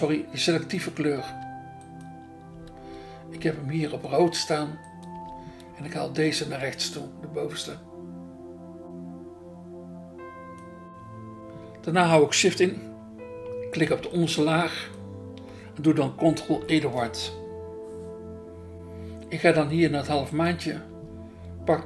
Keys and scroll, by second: 2.5 BackSpace, 5.1 BackSpace, 5.7 BackSpace, 6.4 BackSpace, 16.5 ctrl+e, 20.9 BackSpace, 21.6 BackSpace.